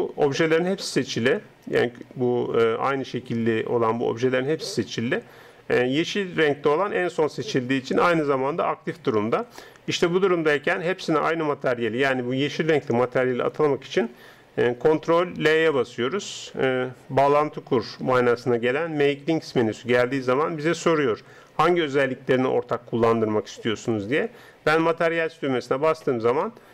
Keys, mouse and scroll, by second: 15.5 ctrl+l, 26.4-26.7 middle drag.